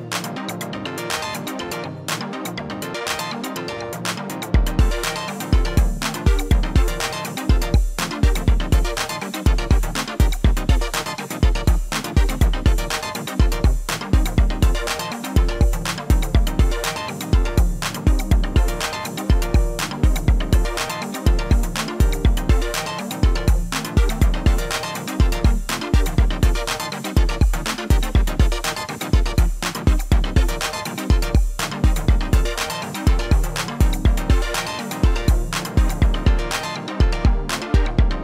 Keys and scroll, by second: 26.8 t.